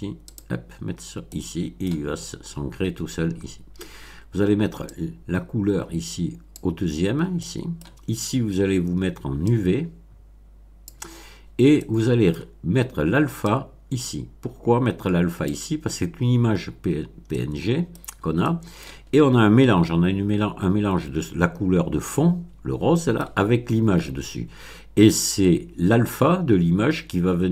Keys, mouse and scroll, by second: 0.3 click, 1.2 middle click, 3.2-3.6 scroll up 2, 4.9-6.7 drag, 7.3-7.9 middle drag, 9.5-11.0 drag, 11.4 scroll down 1, 11.7-12.5 middle drag, 13.4-15.6 drag, 16.7 scroll up 1, 17.2-18.0 middle drag, 17.9 click, 18.0 scroll down 1, 18.4 click, 20.4 scroll down 2, 22.1-23.3 middle drag, 24.6 scroll up 1.